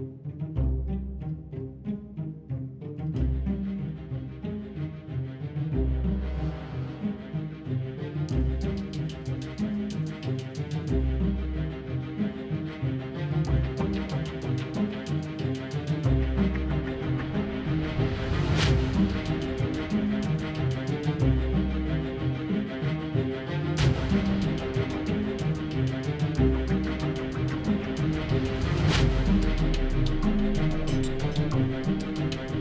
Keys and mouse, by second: 9.0-15.4 middle drag, 15.5-21.4 middle drag, 21.8 z, 21.9 KP_7, 22.3 shift+a, 23.5 KP_1, 23.8 g, 24.0 r, 24.3 g, 25.1-26.5 drag, 26.5 shift+d, 26.7 r, 27.4-28.0 drag, 27.8 g, 28.9 shift+z, 30.7 g, 31.0 r.